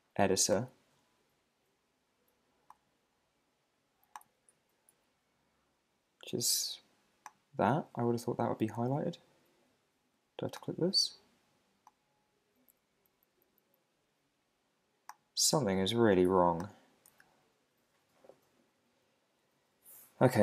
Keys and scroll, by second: 4.5 Right, 4.9 Down, 12.7 Up, 13.6 Up, 17.1 Up, 17.6 Down.